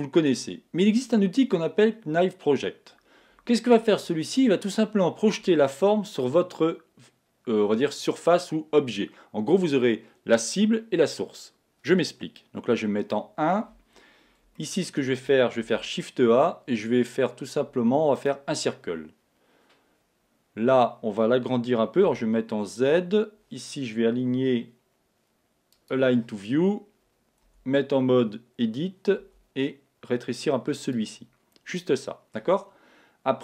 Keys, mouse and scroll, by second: 2.2-4.1 scroll up 1, 4.1-13.0 scroll up 1, 13.0 KP_1, 14.6-16.5 middle drag, 15.6 shift+a, 25.7 click, 27.4 Tab, 31.7-33.4 middle drag.